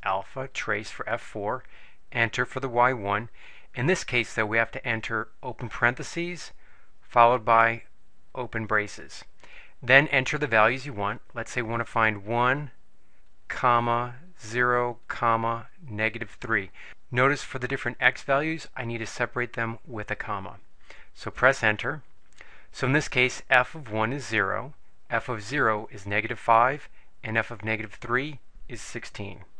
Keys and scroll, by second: 2.3 Return, 5.8 (, 8.6 (, 12.2 1, 13.6 ,, 14.5 0, 15.3 ,, 16.7 3, 21.8 Return.